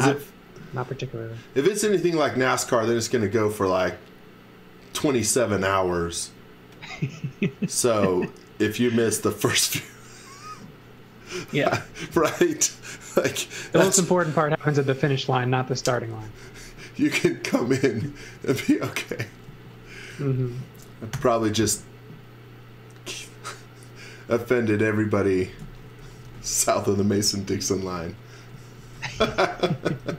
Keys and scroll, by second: 0.7 x, 1.8 v, 11.7 z, 16.0 x, 16.3 v, 18.3 x, 19.5 z, 20.1 x, 21.2 i, 22.2 i, 25.3-27.2 typing, 28.3-30.0 typing.